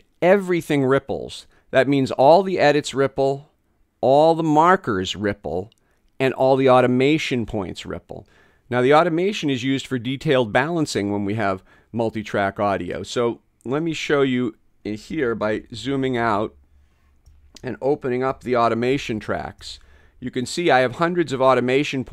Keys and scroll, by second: 15.6 space.